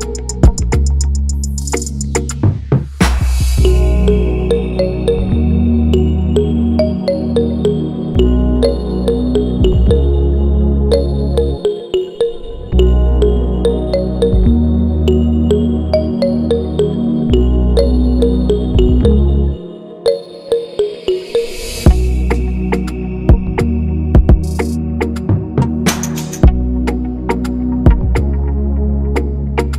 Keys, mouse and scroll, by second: 0.2-1.0 scroll up 1, 1.0 click, 1.7 click, 2.6 click, 10.9 click, 12.0 scroll down 2, 12.2 click, 12.8 click, 13.4 click, 13.9-14.3 scroll up 2, 14.3-15.1 scroll down 2, 15.1 click, 17.7 click, 19.5 scroll down 1, 20.3 scroll up 2, 21.1 click, 21.7 click, 22.7 click, 23.8 click, 24.4 click, 25.2 click, 26.0 click, 26.6 scroll up 1, 27.3-28.6 drag.